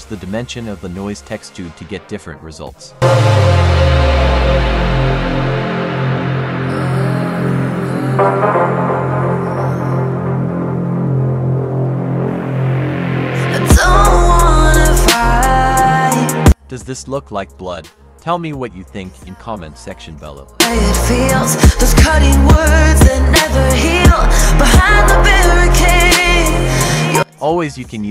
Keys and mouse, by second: 3.9 click, 7.7-9.8 drag, 11.3 click, 12.3 click, 12.6 ctrl+z, 12.7 ctrl+z, 12.8 ctrl+z, 14.1 shift+click, 15.3 ctrl+z, 15.7-17.9 drag, 20.9 click, 22.4 click, 24.3 F3.